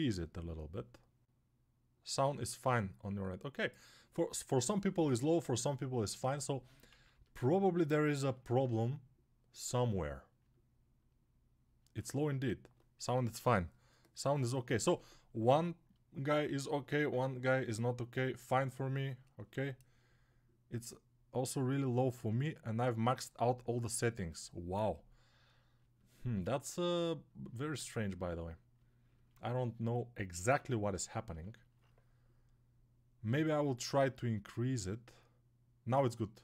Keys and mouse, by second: 6.7 ctrl+z.